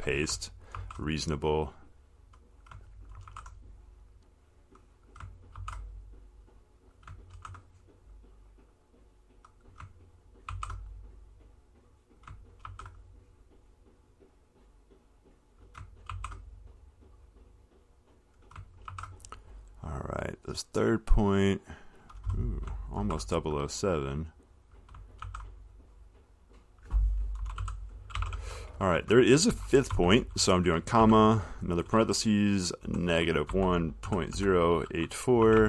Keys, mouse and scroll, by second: 0.3 click, 1.0 ctrl+c, 2.8 click, 3.5 ctrl+v, 5.3 click, 5.8 ctrl+c, 7.1 click, 7.7 ctrl+v, 9.8 click, 10.7 ctrl+c, 12.4 click, 12.9 ctrl+v, 14.8 click, 15.8 click, 16.3 ctrl+c, 18.6 click, 19.1 ctrl+v, 22.7 click, 23.2 ctrl+c, 25.0 click, 25.4 ctrl+v, 26.7 click, 27.4-31.7 typing, 28.8 click, 33.1-35.6 typing.